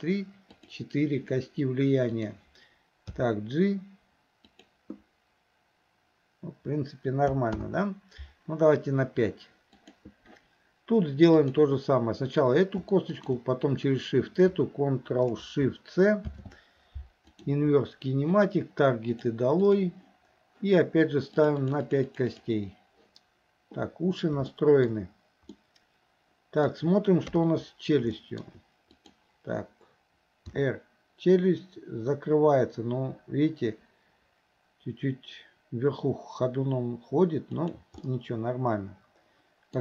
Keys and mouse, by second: 0.5 click, 2.2 click, 3.2 g, 7.7 ctrl+z, 9.8 click, 11.4 click, 13.1 shift+click, 19.1 ctrl+shift+click, 19.7 click, 21.7 click, 21.9 click, 24.5-25.0 shift+middle drag, 25.6-26.7 middle drag, 27.3 KP_3, 28.2 shift+middle drag, 29.1 drag, 30.6 r, 38.0-39.8 middle drag.